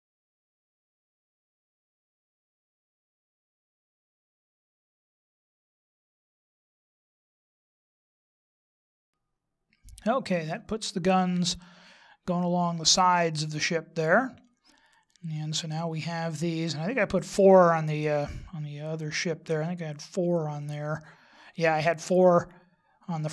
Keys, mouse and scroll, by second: 0.5 right click, 1.1 click, 1.8 right click, 2.1 right click, 2.2 click, 2.9 click, 3.2 click, 3.5 click, 5.0 right click, 5.4 right click, 5.6 click, 6.8 right click, 7.3 click, 7.7 click, 7.9 x, 8.6 shift+s, 10.2 middle click, 15.7-16.5 scroll down 3, 16.5 middle click, 20.6 click.